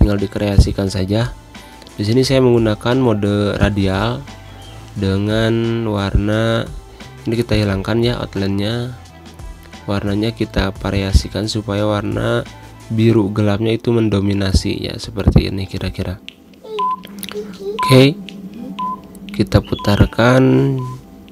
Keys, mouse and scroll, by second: 0.5-2.7 drag, 2.7 g, 3.7-14.8 drag, 14.8 space, 14.9 click, 15.2 space, 17.3-18.7 drag, 18.7-19.4 scroll down 2, 19.4-21.3 drag.